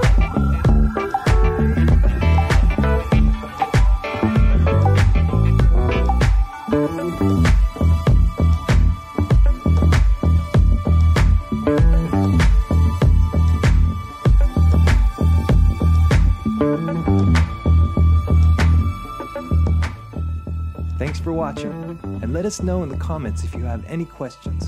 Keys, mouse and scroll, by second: 0.6-1.6 drag, 3.5 click, 4.8 click, 6.2 click, 7.8 click, 15.1 click, 17.7 scroll, 18.8 shift+middle click, 19.9 middle click.